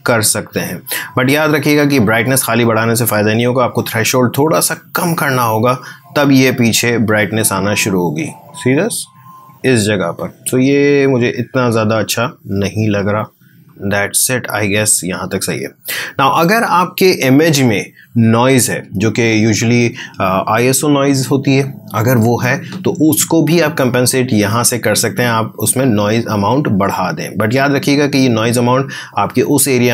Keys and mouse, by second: 26.1-29.9 drag.